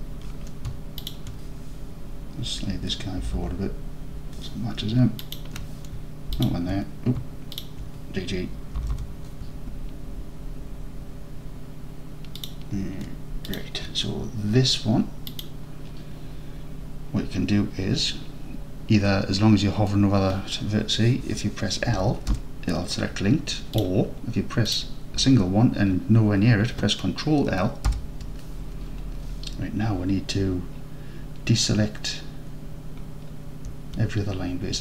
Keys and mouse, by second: 3.2 g, 3.4 g, 5.3 shift+click, 7.6 alt+drag, 8.8 g, 9.0 g, 13.5 shift+click, 15.3 click, 22.4 l, 23.8 click, 27.9 ctrl+l.